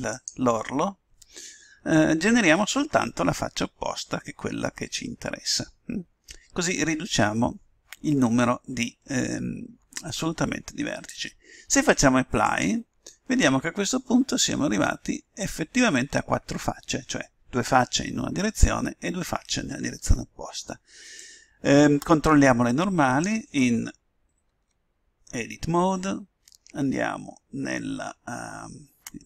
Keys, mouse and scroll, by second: 0.1-1.8 drag, 12.4-14.3 drag, 21.1-23.0 drag, 24.4 Tab.